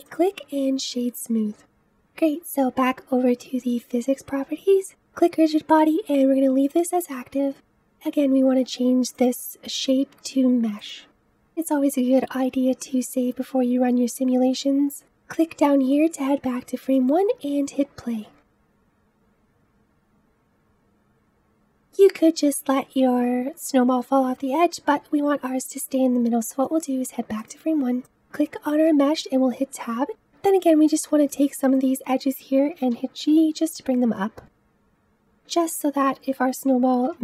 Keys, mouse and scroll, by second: 0.0 right drag, 0.3-1.5 scroll down 1, 4.9-7.6 drag, 9.1-11.1 drag, 11.1 ctrl+s, 14.8-15.9 drag, 16.2 space, 26.3 space, 27.8 click, 30.1 Tab, 30.9 click, 31.0-33.0 middle drag, 33.0 click, 33.3 g, 34.0 click, 34.2 g, 35.2 click, 35.4 g, 36.0 click, 36.2 g.